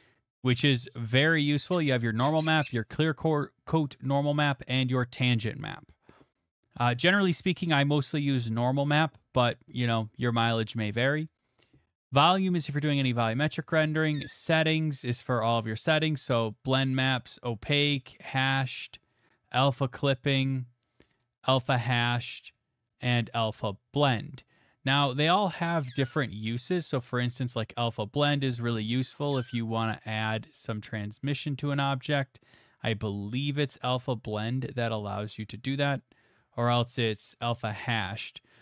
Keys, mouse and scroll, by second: 11.3 click, 11.8-12.1 scroll, 13.2 click, 13.5-14.0 scroll, 16.5 click, 17.1 click, 18.2 click, 18.6 click, 19.2 click, 20.2-22.5 drag, 23.1 click, 24.4 middle click, 25.8 middle click, 26.3 middle click, 28.1-29.1 scroll, 32.4 click, 34.0 click, 35.2 click, 36.4 click, 37.5 click.